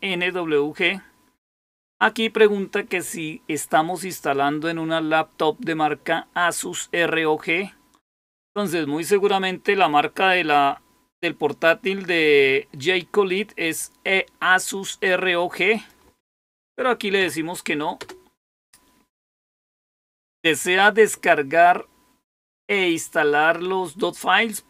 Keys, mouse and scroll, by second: 15.6 click, 17.9 Return.